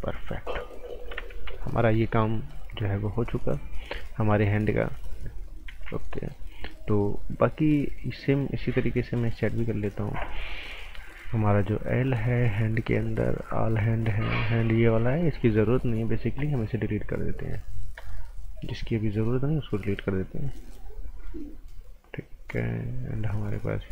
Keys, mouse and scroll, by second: 1.3 ctrl+z, 1.6 scroll down 1, 1.8 right click, 2.6 scroll up 1, 3.4 click, 4.8 click, 5.7 ctrl+z, 6.1 right click, 11.5 click, 20.0 click, 23.4 click.